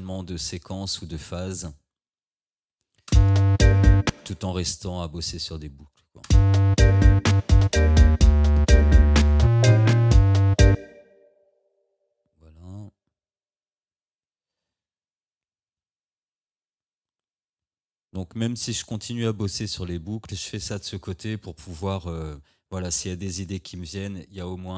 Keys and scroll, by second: 3.1 space, 6.3 space, 10.8 space, 15.6 ctrl+d.